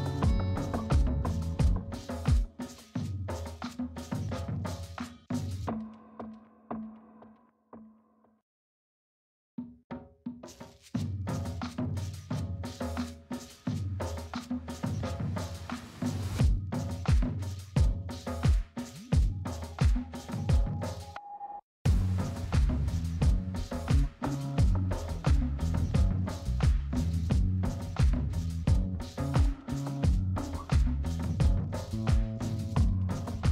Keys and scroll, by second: 0.2 space.